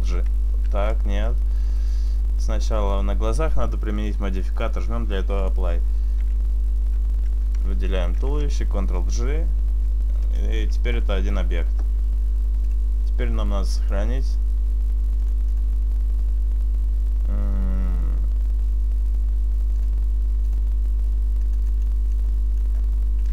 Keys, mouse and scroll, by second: 0.7 ctrl+z, 1.8 right click, 2.2 right click, 5.5 click, 6.8 shift+right click, 8.4 ctrl+j, 10.7 Tab, 11.2 Tab, 12.7 click.